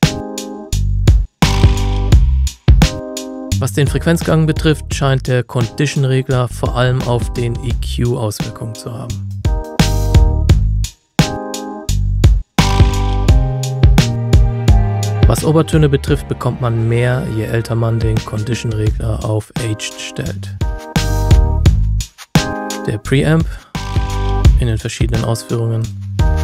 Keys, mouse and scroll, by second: 2.0-2.8 scroll down 1, 3.4 click, 7.4 click, 9.1-11.4 scroll up 1, 11.4 click, 11.7-13.2 scroll down 1, 13.2 click, 13.5-15.1 scroll up 1, 15.2 scroll down 1, 16.8-20.4 scroll up 1, 20.4-23.3 scroll down 1, 23.3 click.